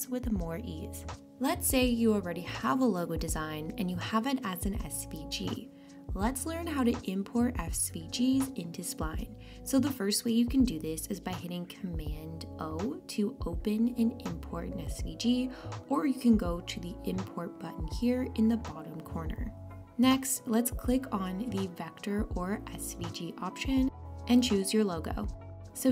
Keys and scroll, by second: 12.3 super+o.